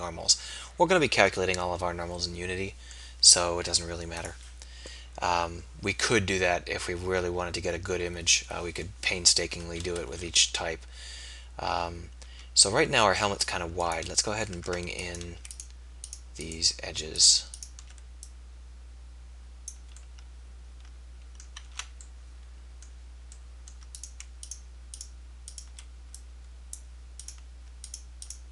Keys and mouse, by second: 4.3-5.4 drag, 9.9 KP_1, 10.1 z, 12.2 z, 13.3 z, 14.6 Tab, 20.0-21.3 middle drag, 21.7 ctrl+z.